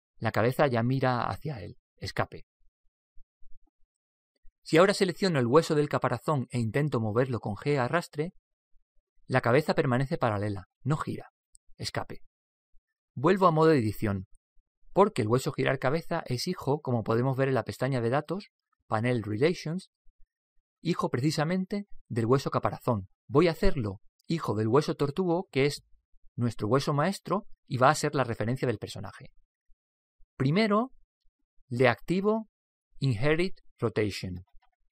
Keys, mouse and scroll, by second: 7.4 right click, 8.5 Escape, 8.5 g, 13.7 Tab, 14.8 Tab, 17.7 right click, 20.2-23.3 drag, 34.4 click.